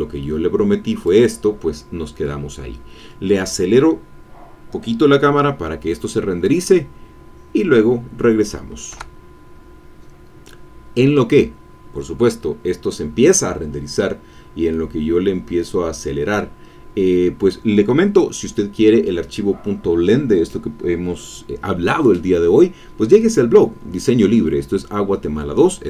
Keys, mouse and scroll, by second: 2.4-2.8 scroll down 1, 8.9 F12, 13.5-14.7 scroll down 1, 14.7 click, 14.9-16.6 middle drag.